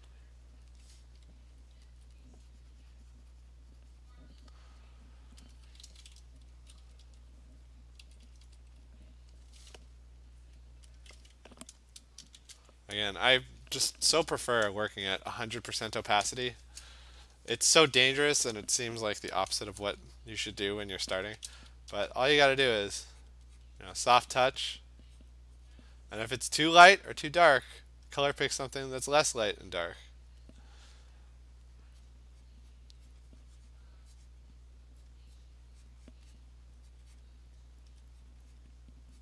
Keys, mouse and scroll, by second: 0.1 click, 0.7 click, 2.1 alt+click, 2.2 alt+click, 4.5 click, 5.6 alt+click, 6.6-8.5 typing, 7.7 click, 8.9 click, 9.5 click, 9.6 alt+click, 10.6 alt+click, 11.0 click, 12.4 shift+1, 14.5 shift+0, 18.3 ), 19.6 click, 21.1 ], 21.3 ], 21.5 ], 22.0 ], 22.7 click, 23.3 click, 23.7 click, 24.0 click, 25.0 click, 25.3 click, 25.8 click, 28.1 alt+click, 28.7 click, 29.3 click, 30.5-35.5 alt+click, 31.5 click, 32.1 click, 32.5 click, 32.8 click, 33.1 alt+click, 33.2 click, 33.9 click, 34.3 alt+click, 34.4 click, 35.1 click, 35.5 click, 35.7 click, 35.9 click, 36.2 click, 36.4 click, 37.0 click, 37.3 click, 37.9 alt+click, 38.3 click, 38.7 click.